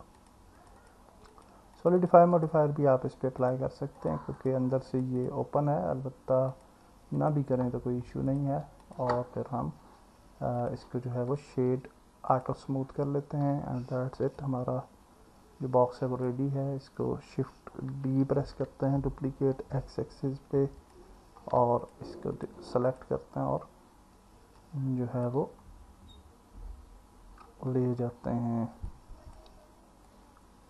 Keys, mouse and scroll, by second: 0.6 click, 0.8 click, 1.3 click, 2.0 click, 5.0 click, 5.2 click, 7.2 click, 8.3-9.0 drag, 14.4-16.3 alt+middle drag, 18.3 shift+d, 19.6 x, 21.8 shift+click, 22.4 shift+click, 22.9 shift+click, 24.6 click, 28.9 click.